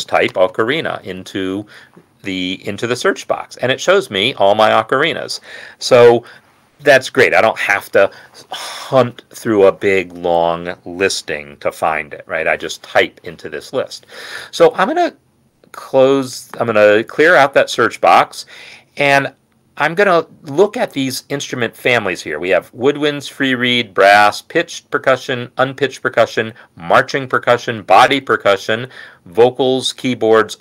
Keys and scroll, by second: 0.0-1.8 typing.